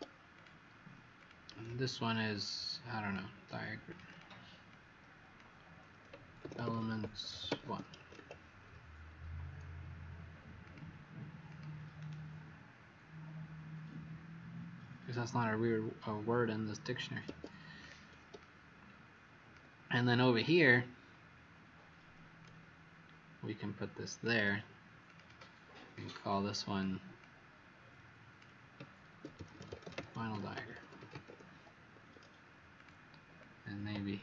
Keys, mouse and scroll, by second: 0.3 click, 1.6 alt+click, 3.8 click, 6.1-8.6 typing, 10.6 click, 11.9 right click, 14.6 Escape, 17.7 click, 18.3 click, 20.3 click, 25.0 click, 25.2 click, 25.4 alt+click, 26.3 click, 28.8-31.7 typing, 31.9 Escape, 32.7 click, 33.3 click.